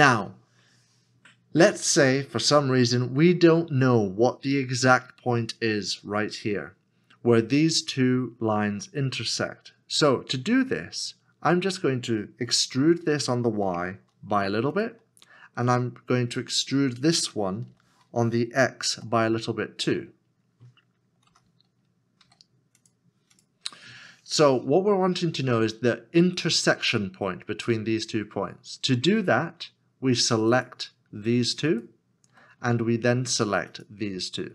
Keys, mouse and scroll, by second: 12.7 e, 14.0 y, 17.7 y, 18.9 x, 21.2 e, 22.2 x, 31.3 x, 31.7 shift+click, 32.7 s, 33.7 shift+click.